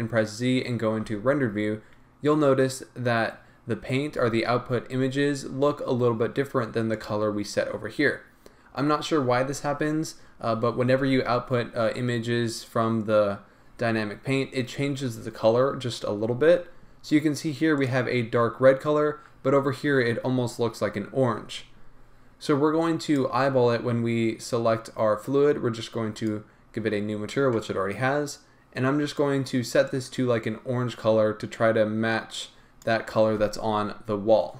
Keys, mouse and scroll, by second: 1.0-1.6 drag, 1.0-1.6 right drag, 1.0 z, 7.1-8.7 drag, 9.0 click, 19.0 click, 23.0 click, 26.2-29.8 drag, 30.3 right click.